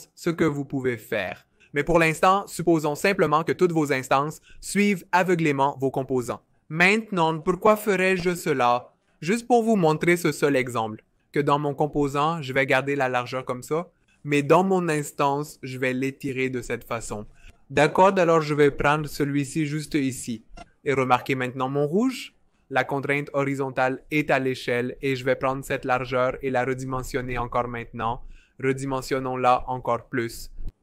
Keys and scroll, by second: 5.6 BackSpace, 25.1 v.